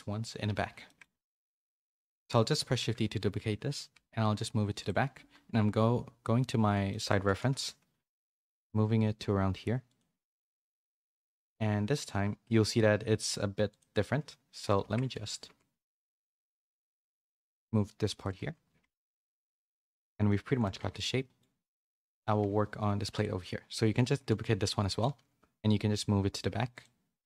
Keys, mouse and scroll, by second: 0.8 shift+middle click, 1.2 a, 1.3 middle click, 1.6 shift+middle click, 2.3 middle click, 2.8 shift+d, 5.6 KP_3, 6.9 shift+middle click, 7.2 g, 14.8 Tab, 15.3-17.0 typing, 18.3 z, 18.8 Tab, 19.0 a, 19.1 a, 19.2-20.3 middle drag, 20.4 shift+middle click, 20.8 Tab, 20.9 middle click, 21.6 middle click, 22.4 a, 23.1 click, 23.8 d, 24.4 d, 25.0 shift+d.